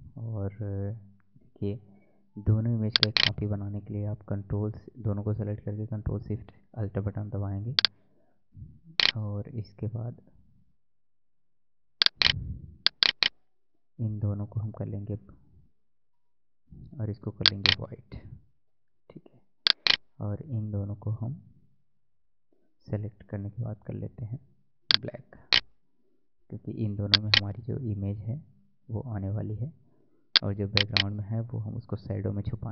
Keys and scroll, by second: 14.7 ctrl+e, 16.0 ctrl+u, 23.5 ctrl+u, 29.0 ctrl+u.